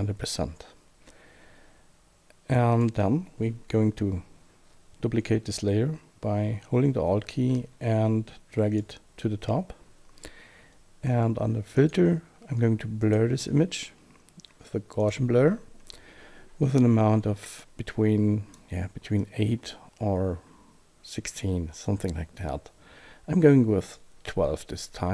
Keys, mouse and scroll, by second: 2.7 click, 6.8 alt+Num_Lock, 7.5 alt+click, 13.0 click, 15.0 click, 16.8 click, 19.2 click.